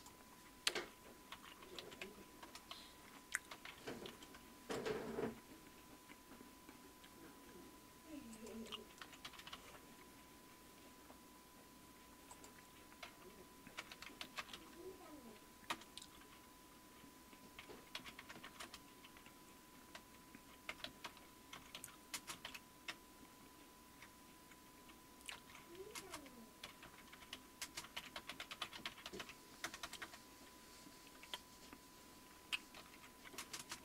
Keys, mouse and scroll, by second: 0.8-2.3 typing, 2.4 Return, 3.4-4.7 typing, 8.3 click, 8.8-10.0 typing, 12.3 click, 13.1-15.0 typing, 15.7 Return, 17.7-24.0 typing, 25.3-30.5 typing, 32.6-33.6 typing.